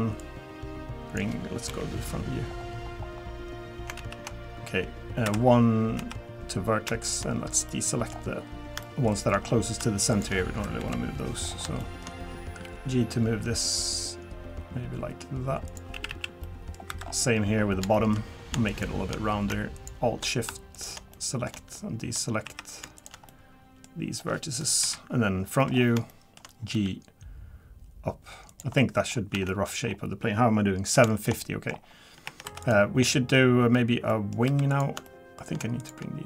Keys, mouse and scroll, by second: 0.2 click, 2.3 KP_1, 2.5 scroll up 1, 3.2-3.9 scroll up 7, 3.9 scroll up 1, 4.0 ctrl+z, 5.3 1, 5.3 2, 6.0 1, 7.0 shift+click, 7.4 scroll down 2, 7.7 middle click, 8.1 scroll down 1, 8.7 scroll down 2, 8.8 shift+middle click, 9.4-9.8 scroll down 2, 10.1 shift+click, 10.8 KP_1, 11.4-11.8 scroll up 4, 11.8 shift+middle click, 12.6 g, 16.1 a, 16.1 a, 16.4 middle click, 16.9 2, 17.0-17.9 scroll down 7, 17.9 shift+middle click, 18.7 shift+click, 19.8 alt+shift+click, 20.7 shift+click, 21.1 middle click, 22.4 1, 23.0 shift+click, 23.3 middle click, 24.1-24.8 scroll up 1, 24.8 KP_1, 25.7-26.0 scroll up 3, 26.1 shift+middle click, 26.7 g, 28.8 middle click, 29.1 scroll down 2, 29.3 Tab, 29.5 middle click, 29.8-30.8 scroll down 2, 31.0 scroll down 2, 31.1 shift+middle click, 31.4 middle click, 31.7 scroll up 2, 32.2 Tab, 32.2 scroll up 1, 32.4 3, 32.6 click, 33.1 middle click, 34.1 middle click, 34.4 3, 34.7 click, 35.1 shift+middle click, 35.8 shift+click.